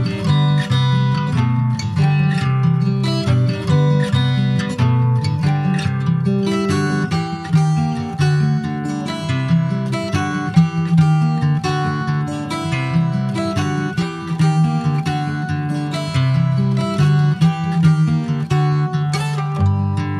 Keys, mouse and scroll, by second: 1.8-3.4 middle drag, 3.4 Tab, 3.8 click, 4.9 3, 5.1 click, 6.1 click, 7.6 Tab, 8.5 click, 9.6 middle click, 10.1 2, 11.0 click, 12.2 1, 12.6 click, 13.8 Tab, 14.0 click, 15.4 2, 15.7 click, 16.1 click, 16.7 shift+click, 17.2 middle click, 17.8 ctrl+b, 19.8 middle click.